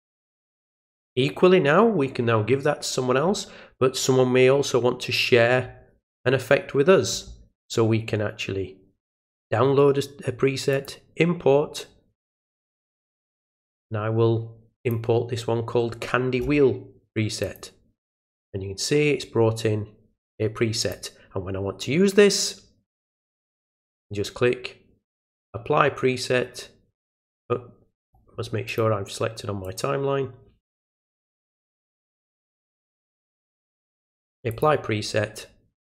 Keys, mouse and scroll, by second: 10.7 click, 12.9 click, 14.8 click, 17.4 click, 20.8 click, 25.3 click, 28.0 click, 28.7 click, 29.6 click, 31.9 right click, 33.0 click, 34.5 click.